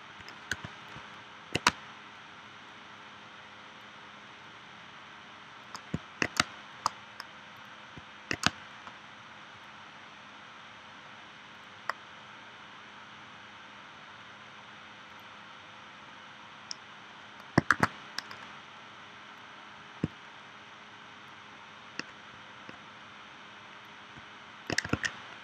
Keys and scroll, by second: 0.5 v, 1.7 space, 6.4 space, 8.4 space, 17.7 shift+w, 24.9 super+z.